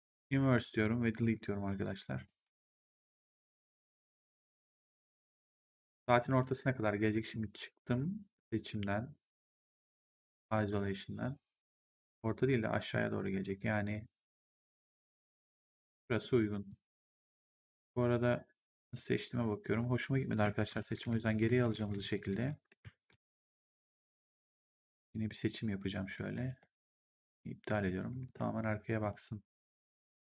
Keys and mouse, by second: 1.1 Delete, 2.2 right click, 4.5 click, 6.3 ctrl+1, 7.0 w, 7.8 click, 12.8 click, 16.6 click, 20.6 ctrl+z, 24.4 shift+click, 28.2 shift+click.